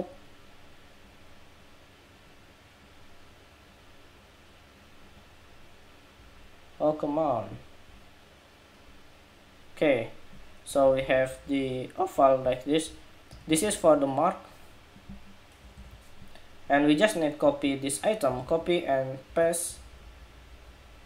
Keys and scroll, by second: 15.5 super+-, 18.2 super+c, 19.0 super+v.